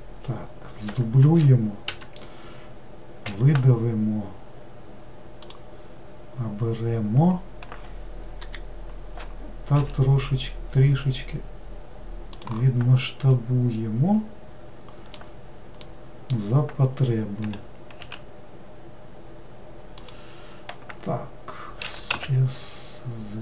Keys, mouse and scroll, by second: 1.2 shift+d, 3.2 e, 8.4 l, 9.7 s, 13.3-17.4 middle drag, 17.4 g, 21.8 s.